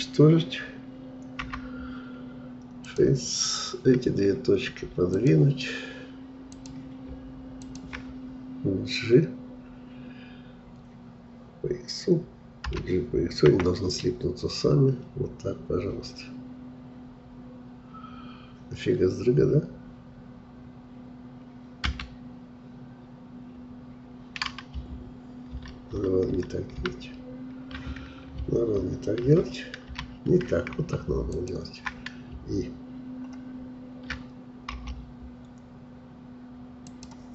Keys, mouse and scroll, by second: 1.5 Delete, 5.2-10.7 drag, 12.7 g, 25.5 ctrl+z, 26.0 ctrl+z, 26.8 ctrl+z, 29.3 ctrl+z, 31.3-34.4 shift+drag.